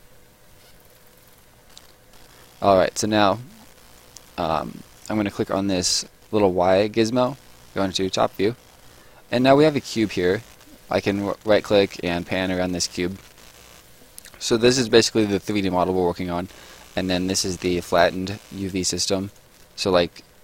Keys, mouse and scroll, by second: 1.2 scroll down 1, 2.4 right click, 2.8 scroll down 1, 3.8 right click, 4.2 middle click, 4.7 right click, 7.1 click, 8.1 middle click, 8.4-8.7 scroll up 1, 9.2 right click, 19.3 click.